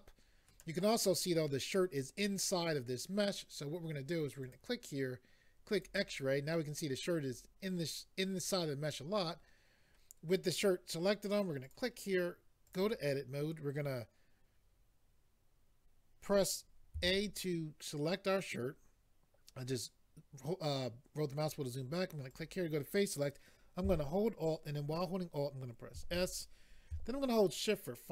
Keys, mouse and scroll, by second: 4.4 click, 5.8 click, 11.6 click, 12.6 click, 16.9 a, 17.9 scroll down 2, 22.3 click.